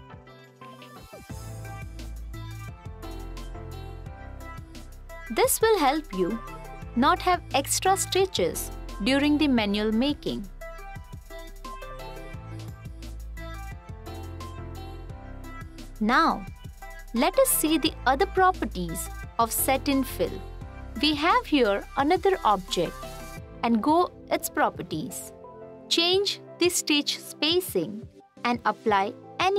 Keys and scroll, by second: 3.8 t, 6.6 t, 23.2 f.